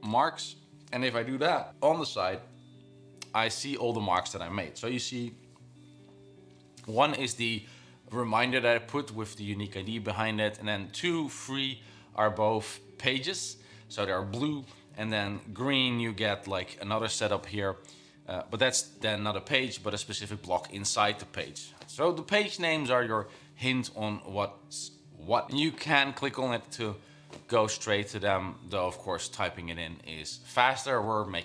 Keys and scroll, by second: 29.6 Escape.